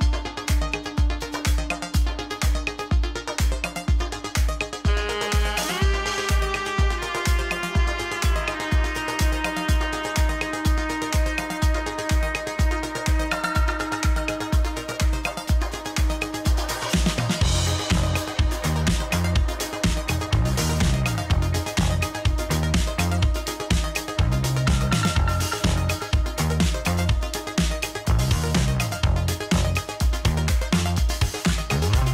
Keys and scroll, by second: 20.5 Escape.